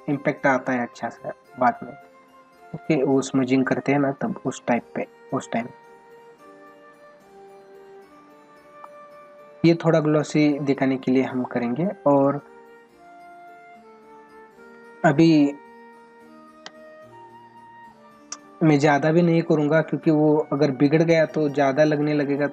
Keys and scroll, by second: 2.0 space, 16.0 space.